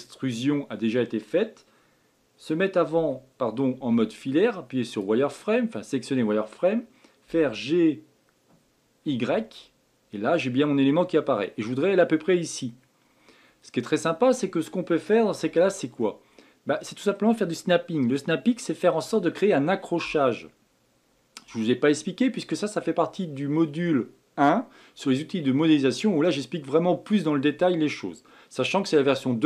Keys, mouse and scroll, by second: 16.0-19.2 middle drag.